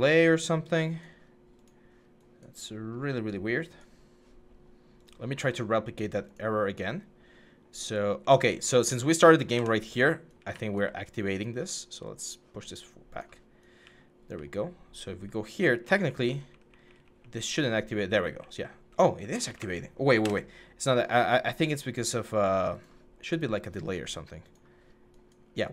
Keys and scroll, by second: 7.9-9.0 typing, 9.3 Escape, 10.1 typing, 13.6 a, 14.1 a, 14.6 w, 15.6-17.3 typing, 20.0 Escape.